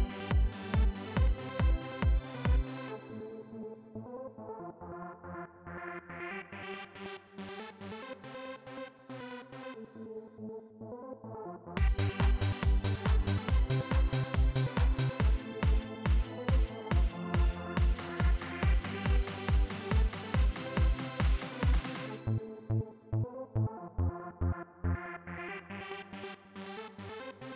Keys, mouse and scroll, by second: 0.1 click, 0.9 right click, 4.2 click, 8.0 click, 10.1 click, 11.5 click, 19.4 click, 24.6 right click.